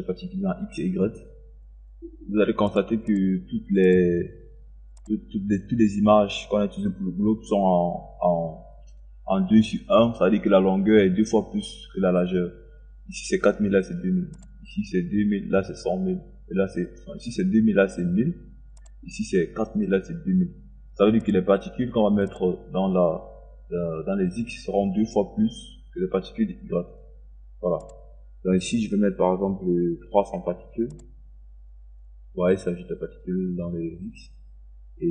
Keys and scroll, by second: 30.1 KP_3, 30.9 KP_0.